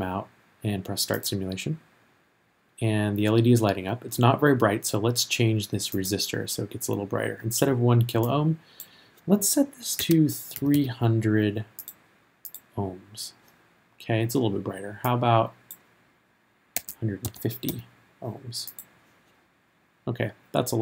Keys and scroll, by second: 10.0 3, 10.5 0, 16.6-18.2 typing.